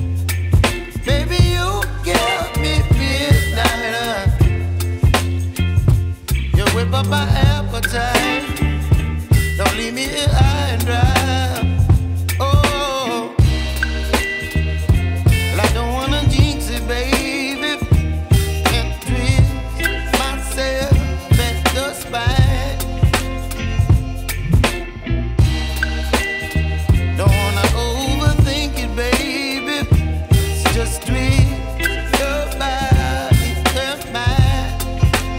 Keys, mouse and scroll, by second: 1.1 scroll down 4, 1.8-3.8 middle drag, 3.8-5.7 scroll down 4, 5.7-6.7 scroll down 1, 7.9-14.3 drag, 14.3 ctrl+s, 17.7 click, 19.2 Delete, 20.5-22.5 drag, 22.7 Delete, 24.1 ctrl+s, 24.7-25.0 scroll down 2, 26.0 click, 27.7-35.3 drag.